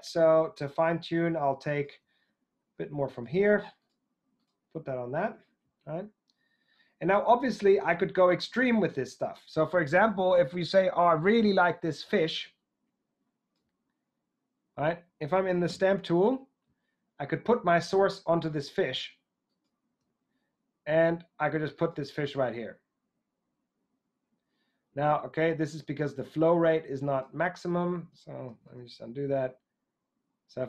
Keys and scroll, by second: 15.7 s, 28.7 super+z.